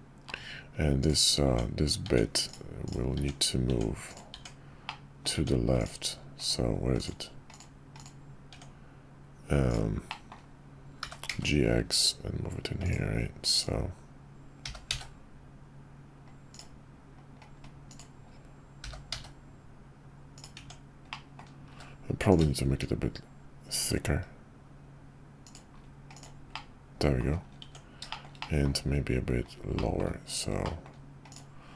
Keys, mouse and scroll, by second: 1.5-4.8 Tab, 4.8 click, 8.5 Tab, 10.1 click, 11.0 g, 14.6 g, 18.8 g, 20.5 Tab, 21.1-21.4 drag, 21.7 q, 26.5-27.2 middle drag, 27.6 Tab, 28.1 shift+middle click, 28.4 middle click, 29.8 middle click, 30.6 middle click.